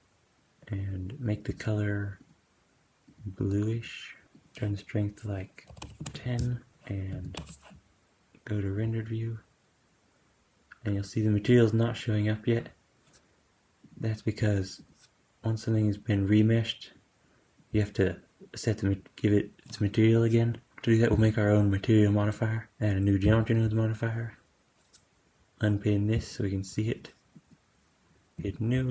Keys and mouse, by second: 4.3-13.8 drag, 6.8 super+s, 7.0 z, 14.7 click, 17.0-26.2 drag, 27.2-28.9 drag.